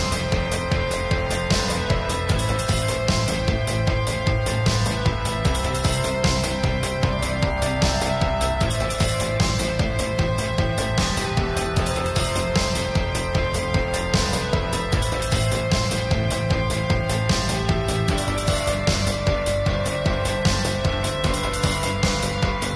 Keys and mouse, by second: 1.3 click, 1.9 ctrl+s, 2.0-2.5 drag, 3.7-5.0 drag, 5.2-5.7 drag, 6.4-7.0 drag, 8.0-9.6 drag, 10.1-10.6 drag, 11.0 click, 12.0 click, 13.3 click, 14.3 ctrl+s, 14.6 ctrl+s, 14.8-15.7 drag, 15.0 ctrl+s, 16.7 click, 17.8 F12.